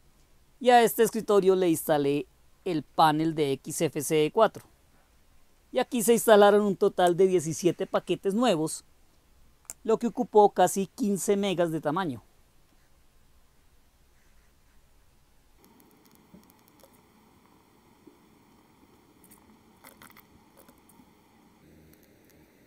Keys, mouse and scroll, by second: 7.1-10.7 drag, 15.6 click, 16.0 click, 16.4 click, 16.8 Return, 19.6-20.7 typing, 20.8 Return, 22.3 click.